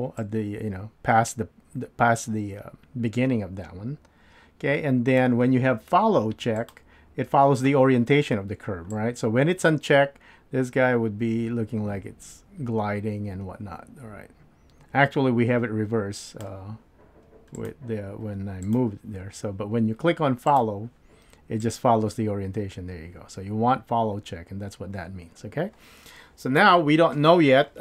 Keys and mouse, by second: 14.5-16.4 drag, 17.5 click, 18.6 click, 20.5 click, 21.6-27.8 drag.